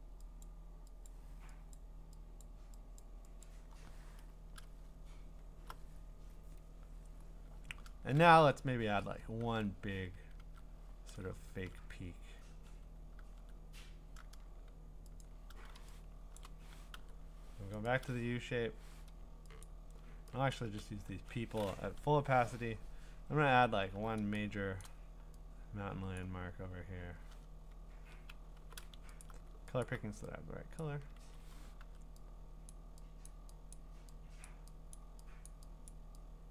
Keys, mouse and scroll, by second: 0.4 click, 1.1 click, 1.7 click, 2.4 click, 3.0 click, 3.4 click, 4.5 Return, 5.0-6.4 scroll, 8.5 alt+scroll, 9.4 ctrl+Tab, 10.4 ctrl+Tab, 11.6 ctrl+Tab, 12.5 ctrl+Tab, 13.2 ctrl+Tab, 15.2 click, 16.3 click, 16.4 click, 16.9 u, 17.9 right click, 19.6 click, 20.5 click, 22.1 0, 23.0-24.2 scroll, 24.8 click, 24.9 ctrl+z, 28.5 b, 29.2 alt+click, 29.8 alt+click, 30.8 click, 31.2 ctrl+z, 32.7 click, 33.3 click, 33.7 click, 33.8 u, 34.5 click, 34.9 click, 35.5 click, 35.9 click.